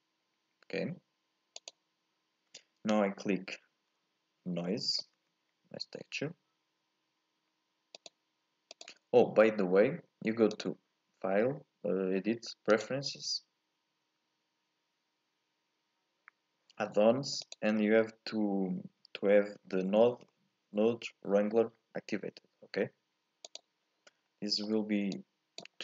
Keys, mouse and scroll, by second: 9.2 scroll up 1, 9.4-10.5 middle drag, 10.5-15.3 drag, 24.1 scroll down 2, 24.4-25.1 scroll up 1, 25.1 click.